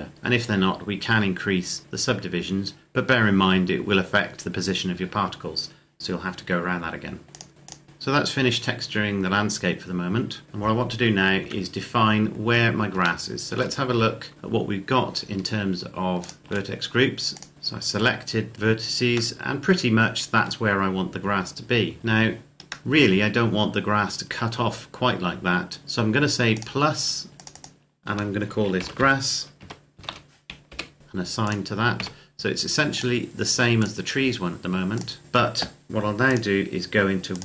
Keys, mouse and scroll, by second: 7.3 click, 10.4 click, 11.2 KP_7, 12.0-12.8 scroll down 1, 13.0 shift+middle click, 13.6 Tab, 15.1 a, 16.0 click, 16.4 shift+middle click, 17.1 click, 18.5-19.1 scroll down 1, 19.1 middle click, 22.8 middle click, 26.3 click, 28.6-29.8 typing, 30.5 Return, 31.3 click, 31.8 a, 32.7 click.